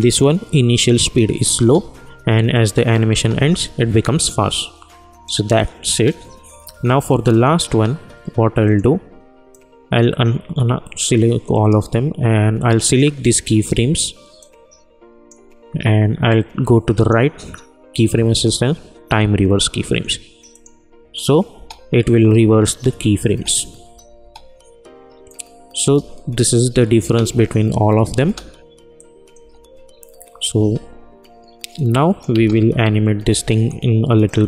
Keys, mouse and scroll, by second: 1.6 space, 5.2-16.9 drag, 16.9 right click, 20.5 click, 21.5 space, 25.2 click, 25.8 space, 28.9 click, 29.3 space, 31.7 click, 32.3 space, 34.2-34.4 drag.